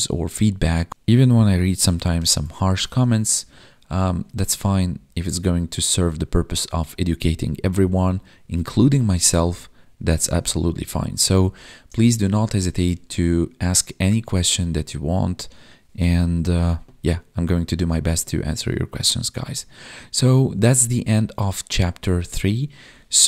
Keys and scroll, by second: 2.2 ctrl+Home, 3.1 ctrl+s, 4.8 Down, 6.9 Down, 9.0 Down, 10.3 Up, 18.0 Up, 18.6 Up.